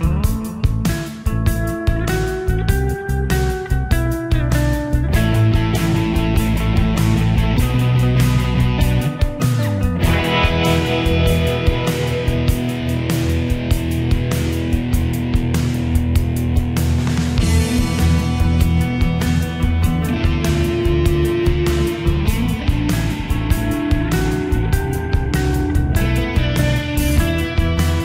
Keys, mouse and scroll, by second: 24.3 shift+r, 24.6 shift+click, 25.0 ctrl+g, 26.0 click, 27.4 typing.